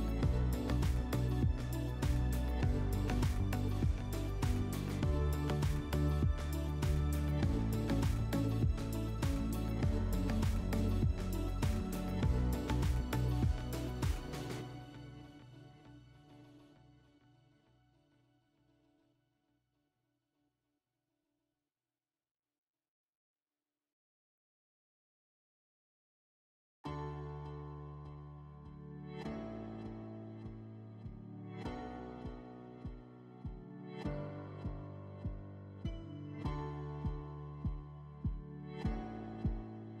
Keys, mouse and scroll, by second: 1.1 click, 1.2 click, 2.0 0, 3.0-5.8 BackSpace, 3.4 1, 5.7 click, 36.2 click, 37.8 click, 38.8-40.0 drag.